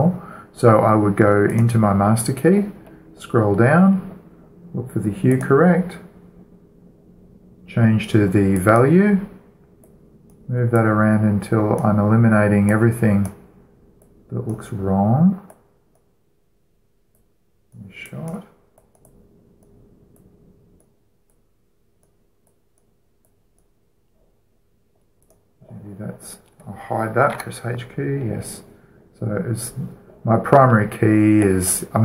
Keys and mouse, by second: 2.2-4.1 right drag, 4.1-6.0 middle drag, 6.0-7.9 drag, 7.9-9.2 middle drag, 9.2-12.6 drag, 12.7-26.2 drag, 25.9-27.8 right drag, 28.0 h, 31.2-32.0 middle drag.